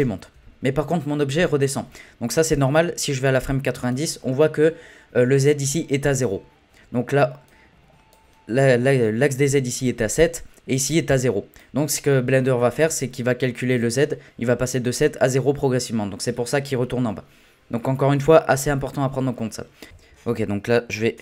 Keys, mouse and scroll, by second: 0.3 space, 3.0-6.1 drag, 7.5-10.5 drag, 10.9-16.8 drag, 19.9-21.2 drag.